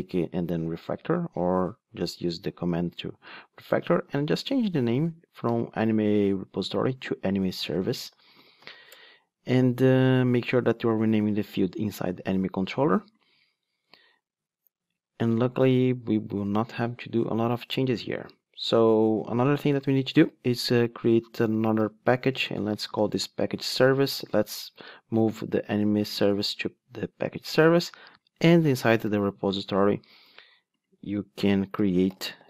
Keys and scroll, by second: 2.3 shift+F6, 5.0 alt+shift+Left, 5.4 alt+shift+Right, 20.2 super+n.